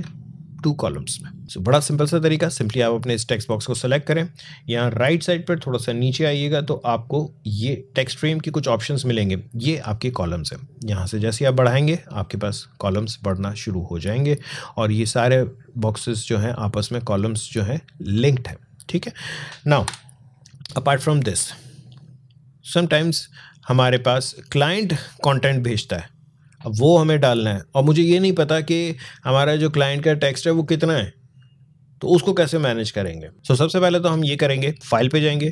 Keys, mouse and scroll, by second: 1.4 click, 2.8 click, 5.2-9.4 drag, 11.0 click, 14.9 click, 19.7 Delete.